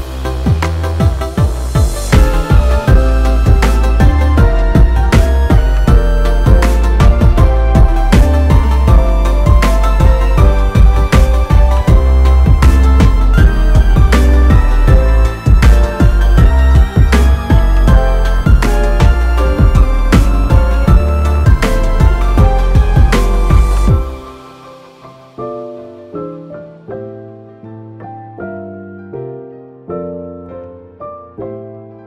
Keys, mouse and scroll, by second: 0.8 click, 2.5 click, 4.4 click, 6.3 o, 7.8 scroll down 2, 8.4 middle click, 8.4-9.3 scroll down 5, 9.4 click, 13.3 shift+middle click, 13.6 middle click, 13.9 ctrl+middle click, 14.4 middle click, 15.4 Tab, 16.7 click, 17.2 click, 17.5 middle click, 18.7 middle click, 19.3 alt+click, 19.7 middle click, 21.5 click, 22.1 Tab, 22.7 middle click, 23.3-24.2 scroll up 5, 24.9 Tab, 26.2 click, 26.9 s, 31.4 middle click, 31.7 scroll down 4, 31.9 middle click.